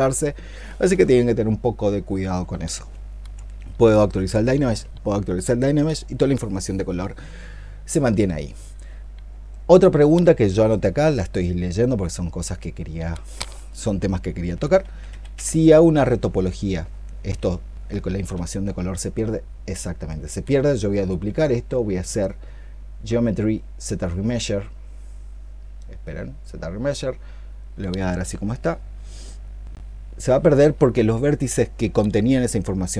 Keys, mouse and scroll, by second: 4.0 ctrl+click, 14.7 ctrl+z, 14.9 ctrl+z, 15.2 ctrl+z, 16.1 ctrl+click.